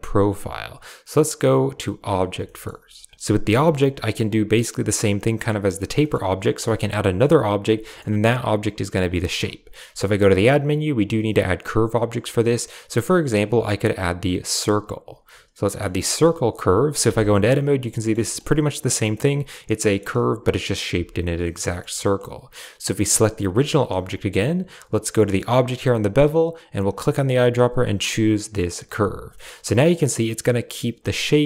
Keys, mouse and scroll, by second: 1.9 click, 2.3 shift+click, 3.9 click, 5.9 click, 7.7 shift+drag, 10.1 shift+a, 14.5 typing, 15.5 drag, 15.9-16.9 typing, 16.9 Tab, 17.9 click, 18.1 shift+click, 19.7 click, 20.9 Tab, 21.3 click, 21.6 shift+click, 23.1 right click, 23.3 g, 25.4-25.9 drag, 26.8 click, 28.6 typing, 29.2 shift+click, 29.4 shift+middle click, 30.9 click.